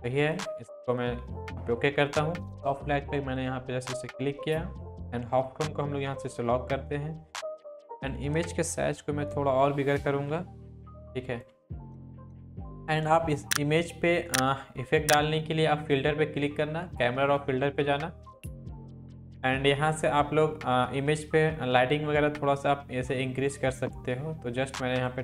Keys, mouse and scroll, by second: 8.8 ctrl+t, 10.3-11.5 alt+drag.